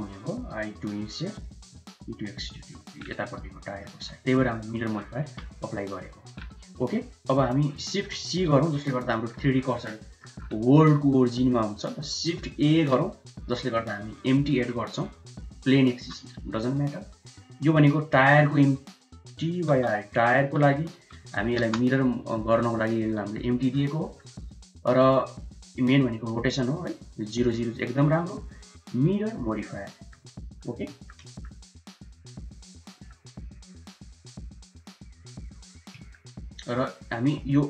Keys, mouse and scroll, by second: 0.9 i, 1.7 e, 2.7 middle click, 3.6 middle click, 3.9 Tab, 5.6-6.2 middle drag, 6.8-7.6 middle drag, 7.8 shift+middle click, 8.4 shift+c, 8.9 middle click, 9.9 shift+middle click, 12.6 shift+a, 16.0 g, 17.8-22.6 drag, 23.4 shift+middle drag, 24.0 middle click, 26.7-29.5 drag, 29.8 middle click, 30.2 shift+middle click, 30.8 shift+middle drag, 31.2 middle click, 32.0 click, 32.5-32.8 drag, 32.8 middle drag, 34.8 click, 35.9 ctrl+a.